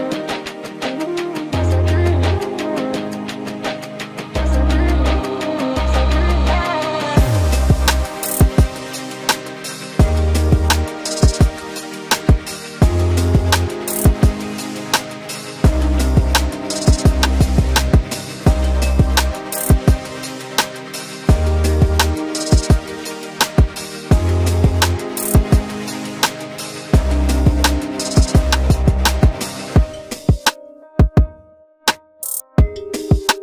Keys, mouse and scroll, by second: 30.2 ctrl+x.